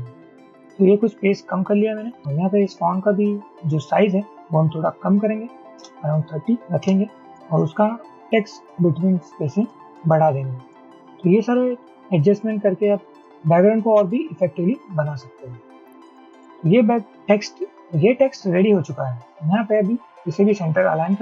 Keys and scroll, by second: 5.7-6.4 typing, 7.0 Return, 8.2 shift+Up, 9.9 shift+Up, 10.2 shift+Up, 10.4 shift+Up, 11.2-12.1 Down, 16.0-16.3 shift+Up.